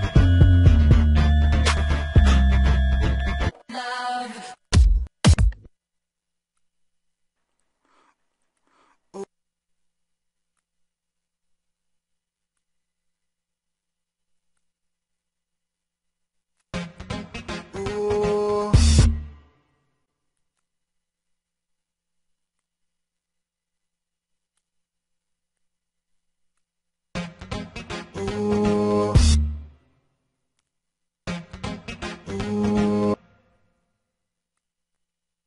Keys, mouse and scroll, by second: 24.3 click.